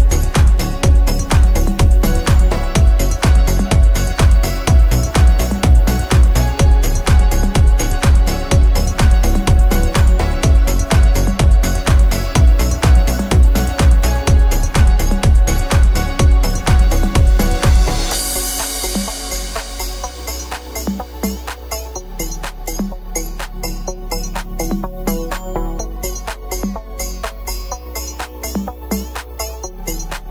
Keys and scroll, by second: 26.4 z.